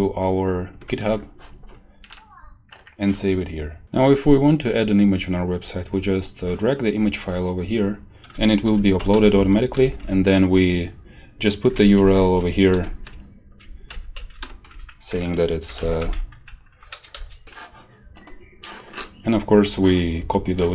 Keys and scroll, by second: 0.8 ctrl+v, 9.1 ctrl+shift+Right, 9.9 Right, 11.7 ctrl+Right, 12.7 ctrl+shift+Left, 13.8 ctrl+shift+Right, 15.4-16.4 typing, 17.1 Return.